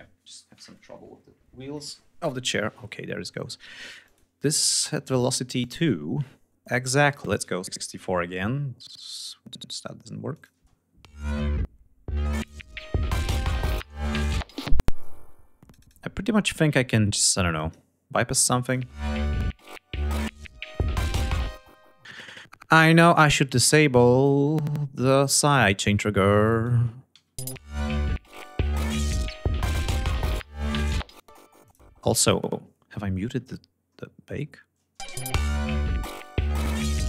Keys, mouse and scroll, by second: 3.4 click, 5.0 click, 6.0 click, 6.7 click, 7.6-8.4 typing, 8.5 click, 9.7 click, 10.0 space, 11.8 click, 12.7 click, 14.2 space, 14.4-15.4 drag, 16.9 click, 18.0 click, 18.1 space, 20.0 click, 20.8 space, 21.7-23.5 scroll up 8, 23.8 click, 24.2-25.5 scroll up 6, 25.9 ctrl+click, 26.7 alt+1, 27.0 alt+space, 30.7 space, 31.2 click, 31.7-32.0 scroll down 2, 32.8 scroll down 2, 32.9-33.8 scroll up 4, 34.5 space, 34.8 scroll up 2, 36.0 scroll up 2, 36.6 scroll up 2.